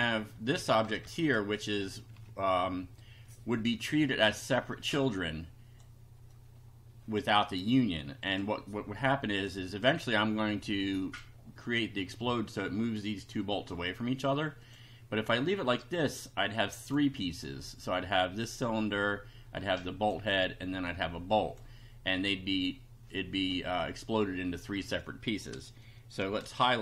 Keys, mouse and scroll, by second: 0.8 Right, 2.2 Right, 4.7-6.0 drag, 6.3-7.3 drag, 8.3 click, 9.6-11.3 drag, 14.6 click, 16.8 click, 17.3 click, 18.0 click, 19.0-20.2 drag, 20.9 click, 24.6 click, 26.4 shift+3.